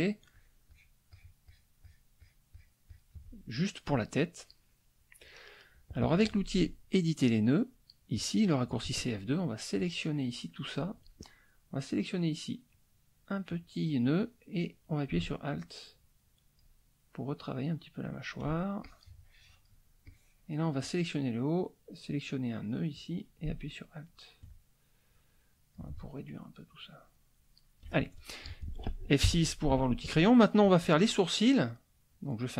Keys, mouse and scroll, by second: 0.3 shift+click, 1.1 shift+click, 3.5-5.2 shift+middle drag, 8.1 click, 9.8-11.0 drag, 12.7-16.8 drag, 17.2-18.5 alt+drag, 18.8-19.8 alt+drag, 20.0 click, 22.9-24.5 drag, 25.1 alt+click, 26.5-27.9 alt+drag, 29.2 F6, 29.7 middle click, 32.1 click.